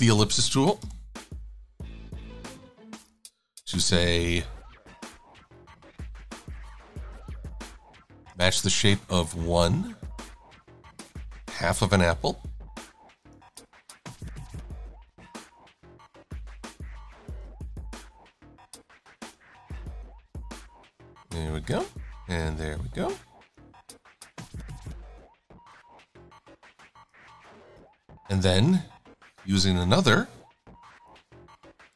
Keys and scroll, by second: 5.3 a, 8.7 x, 29.9 l.